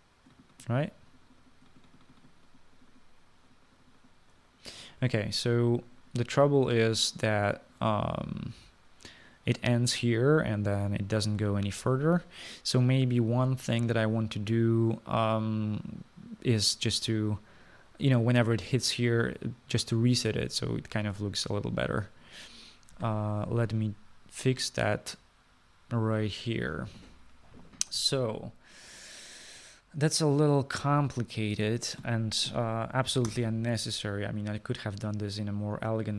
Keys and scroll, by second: 34.4 Return.